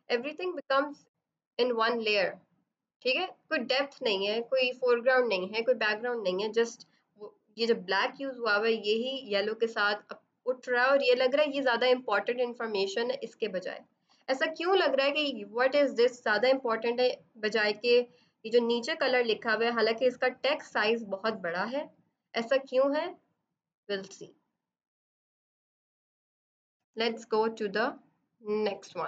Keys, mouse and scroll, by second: 12.9 click, 14.0 ctrl+z, 24.6 click, 26.7 F7, 28.1 click.